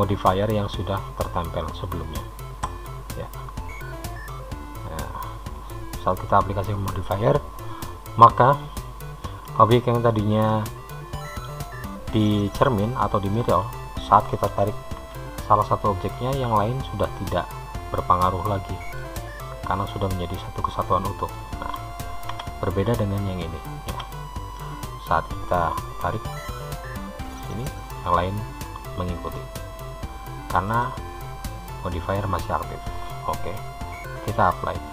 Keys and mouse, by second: 2.9 click, 4.5-6.3 middle drag, 9.8 Tab, 10.6 middle click, 12.4 click, 13.6 middle click, 15.2 g, 20.8 middle click, 22.5 Tab, 23.2 click, 24.2 Tab, 26.1 g, 34.8-34.9 drag.